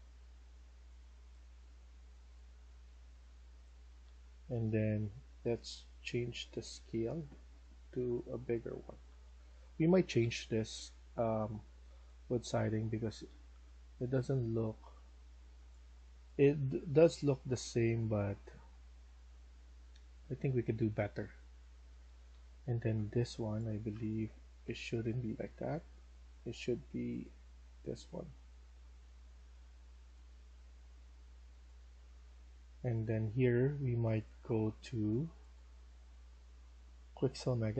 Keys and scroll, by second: 2.2-4.4 typing, 8.9-10.9 typing, 12.0-14.7 typing, 16.8 s, 18.4-23.3 typing, 24.1 ctrl+z, 24.5 ctrl+z, 30.3-32.7 typing.